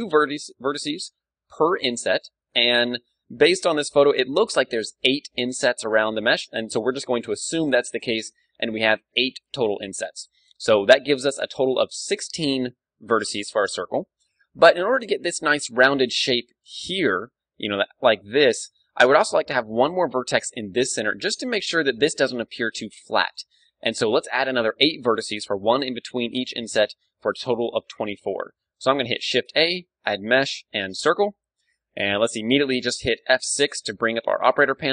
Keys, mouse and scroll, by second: 15.2 ctrl+d, 15.4-17.0 drag, 17.0 middle click, 17.1 right click, 17.4 middle click, 17.7-19.2 drag, 17.7 right click, 23.0 d, 23.4-26.2 right drag, 26.7-31.0 middle drag, 29.1 shift+a, 31.4-33.1 middle drag, 33.1 F6.